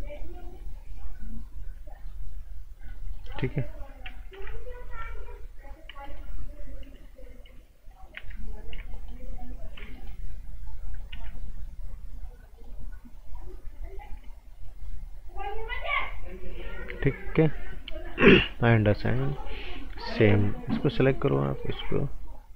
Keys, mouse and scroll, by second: 0.0 click, 3.1 right click, 3.5-4.3 scroll up 1, 4.3 b, 4.8 click, 6.0 alt+right click, 8.9 right click, 9.9 right click, 11.1 t, 12.5 click, 15.8 click, 19.1 right click, 20.2 b, 20.9 click, 21.5 alt+right click.